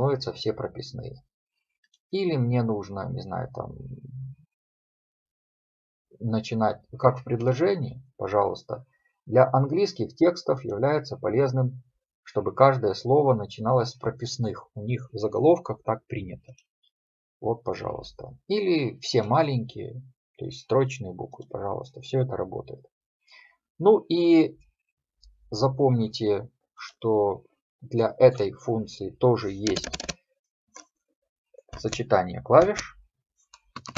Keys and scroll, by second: 33.8 Escape.